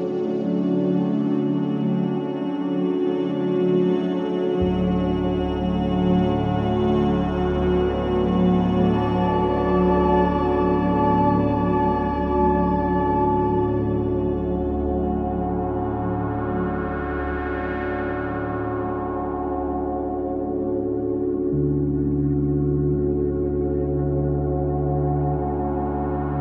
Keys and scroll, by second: 0.1 3, 0.4 4, 2.9 3, 3.2 ], 7.7 ,, 8.1 ,, 20.2 ], 20.8 ,.